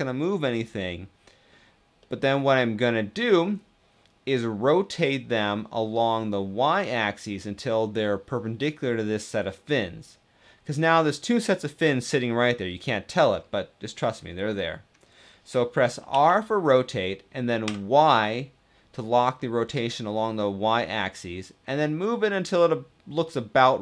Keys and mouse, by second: 1.8-2.6 drag, 2.6 middle click, 15.9 r, 17.4 y.